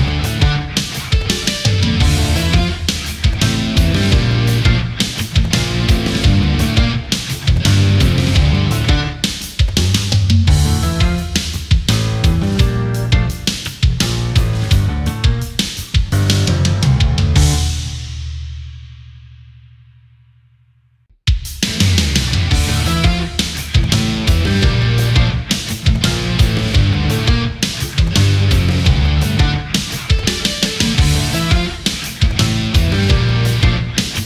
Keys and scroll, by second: 0.6 ctrl+z, 1.7 ctrl+z, 4.5 space, 6.3 space, 21.3 space, 30.7 space.